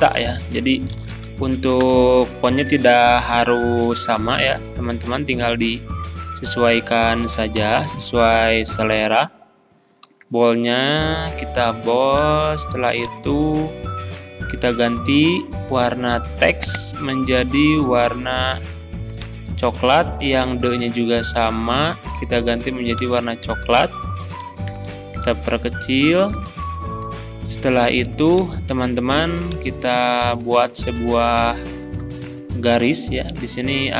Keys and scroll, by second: 1.0 a, 1.0 p, 1.1 a, 1.8 Return, 3.2 ctrl+b, 4.4 ctrl+], 7.6 ctrl+[, 10.1 ctrl+b, 11.5 ctrl+b, 24.2 ctrl+[.